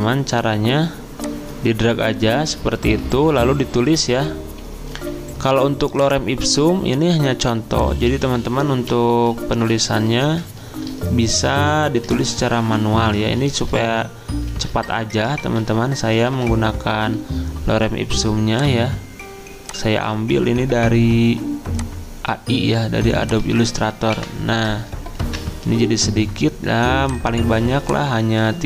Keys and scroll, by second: 3.3 ctrl+v, 8.9 ., 10.2 ctrl+shift+Up, 11.4 ctrl+x, 11.8 ctrl+a, 12.6 Delete, 13.5 ctrl+a, 13.8 Delete, 14.5 ctrl+a, 14.8 Delete, 15.4 ctrl+a, 15.7 Delete, 16.3 ctrl+a, 16.5 Delete, 23.5 ctrl+a, 24.1 Delete, 25.2 ctrl+v.